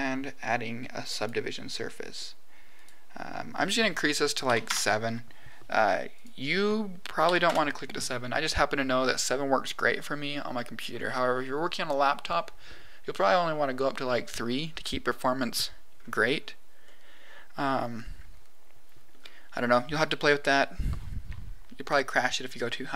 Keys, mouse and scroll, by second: 2.7-5.2 drag, 6.1-8.3 drag, 15.9-16.8 scroll up 4, 16.8-19.0 middle drag, 19.1 scroll up 1.